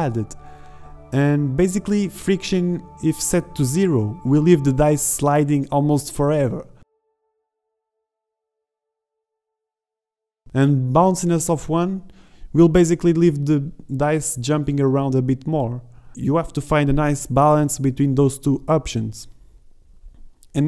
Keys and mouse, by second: 0.3-1.3 drag, 1.7 alt+a, 3.0-5.4 drag, 5.7 shift+Down, 5.8 shift+Left, 6.0 alt+a, 12.4 alt+a, 13.4 shift+Left, 14.7 click, 16.7 alt+a.